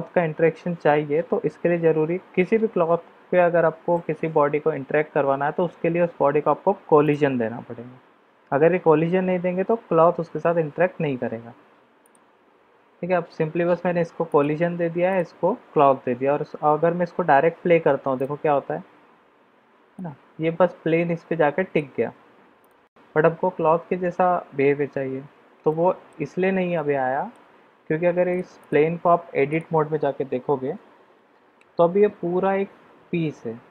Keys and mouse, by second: 7.0 click, 12.0 click, 15.1 click, 18.2 click, 19.9-21.7 middle drag, 22.6 click, 25.7 middle click, 26.8 middle click, 28.6 click, 29.4 click, 30.6 Tab.